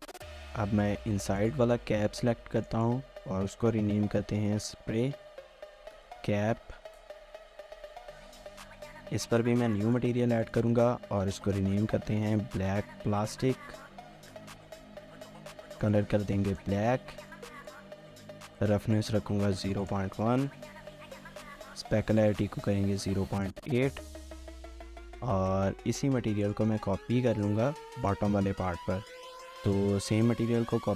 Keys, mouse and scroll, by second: 2.8 double click, 4.2-7.1 typing, 11.4-14.5 typing, 15.2 middle click, 18.8 middle click, 20.5 middle click, 22.4 middle click, 23.9 ctrl+s, 26.6 ctrl+s, 26.8 shift+middle click, 27.5 shift+middle click, 27.7 shift+middle click.